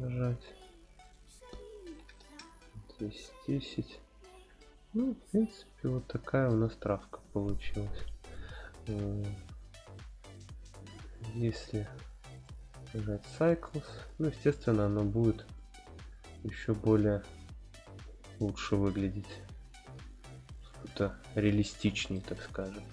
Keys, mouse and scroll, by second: 1.0-3.2 drag, 3.9-4.6 scroll down 2, 4.6-6.6 middle drag, 7.0-7.6 scroll up 1, 9.7 click, 9.7 scroll up 1, 10.4-12.2 scroll up 2, 12.2-13.8 drag, 15.4-16.9 drag, 19.5 scroll down 1, 22.1-22.9 middle drag.